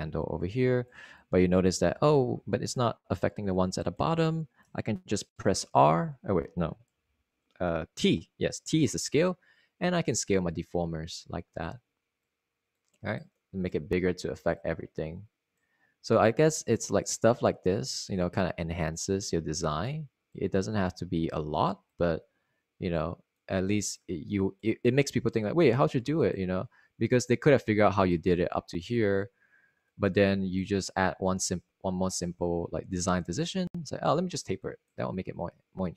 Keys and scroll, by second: 6.8 r, 8.0 e, 8.6 t.